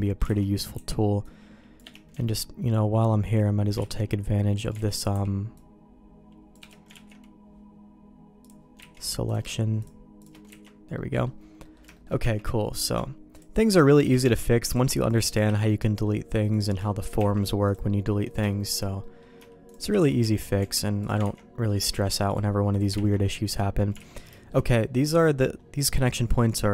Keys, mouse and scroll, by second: 0.0 middle click, 0.3 alt+a, 0.7 c, 3.8 ctrl+q, 4.8 alt+a, 5.1 c, 6.9 ctrl+q, 8.9 ctrl+x, 9.3 click, 9.8 shift+click, 10.2 shift+click, 10.6 ctrl+x, 10.9 middle click, 11.6 middle click, 11.9 shift+middle click, 12.2 Tab, 12.7 click, 13.3 shift+click, 14.0 f, 14.2 Tab, 14.6 click, 15.1 shift+click, 15.4 f, 15.7 middle click, 16.5 click, 16.8 shift+middle click, 17.2 Tab, 17.6 click, 18.1 middle click, 18.5 shift+middle click, 19.0 middle click, 19.6 shift+click, 19.9 f, 20.2 Tab, 20.6 Tab, 21.0 click, 21.2 ctrl+x, 21.6 middle click, 21.9 Tab, 22.3 click, 22.9 ctrl+x, 23.5 middle click, 24.0 alt+a, 24.3 shift+middle click, 26.3 middle click.